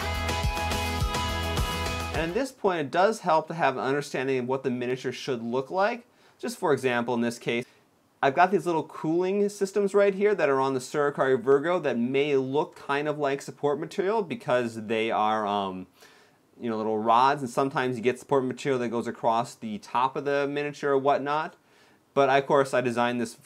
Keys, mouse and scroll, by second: 0.0 x, 0.2 scroll down 2, 0.2 shift+middle click, 0.5 middle click, 1.0 click, 1.2 ctrl+l, 1.3 x, 1.5 middle click, 3.6-4.2 scroll up 3, 4.2 middle click.